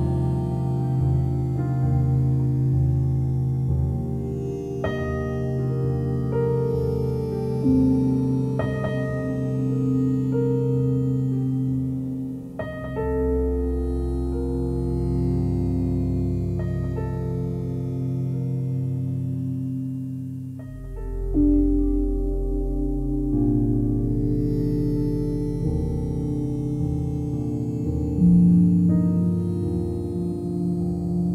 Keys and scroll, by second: 25.7 ctrl+z.